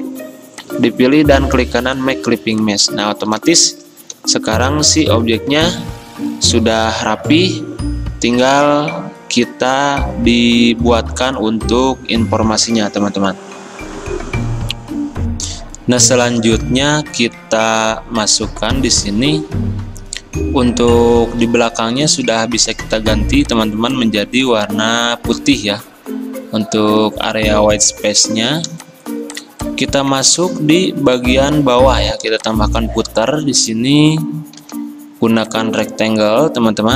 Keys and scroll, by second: 3.7 f, 13.8 Escape.